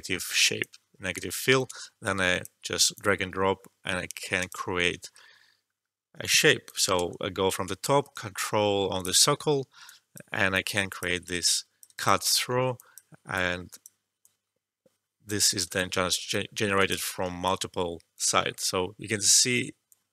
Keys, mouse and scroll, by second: 1.1 space, 2.9-4.9 alt+drag, 4.9 e, 6.2 click, 6.9 space, 7.5 space, 9.8 ctrl+click, 11.8 alt+right click, 12.0-15.7 alt+drag, 15.7-17.0 alt+drag, 17.0 alt+shift+middle click, 17.4 e, 18.1-19.8 drag.